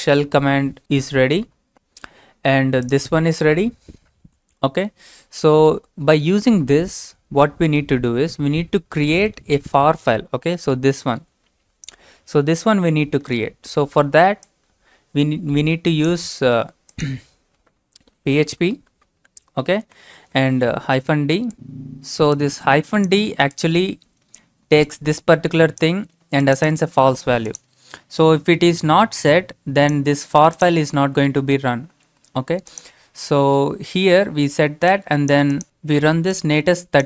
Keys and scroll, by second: 18.5 typing, 19.6-20.3 typing.